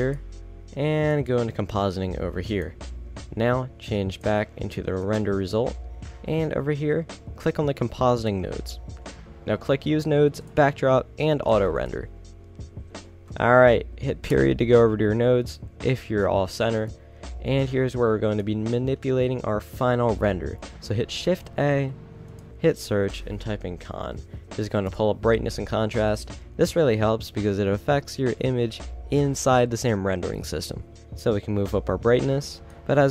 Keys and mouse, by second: 2.5 middle click, 26.9-28.5 middle drag, 29.4-31.7 middle drag.